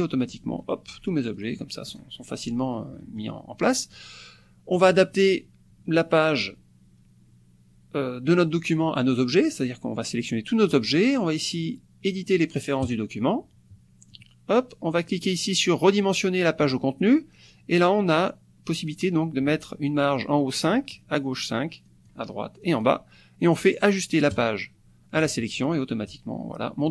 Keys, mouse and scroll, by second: 1.4 click, 1.6 middle click, 3.0 click, 4.0-5.0 drag, 10.0 click, 12.9 click, 14.1 click, 15.4 click, 16.7 click, 19.7 click, 21.0 click, 21.9 click, 22.6 click, 24.3-26.4 drag.